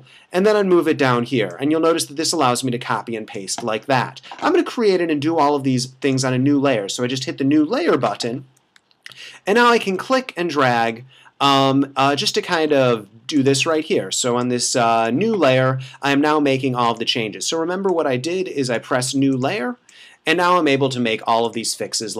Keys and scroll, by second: 7.8 [.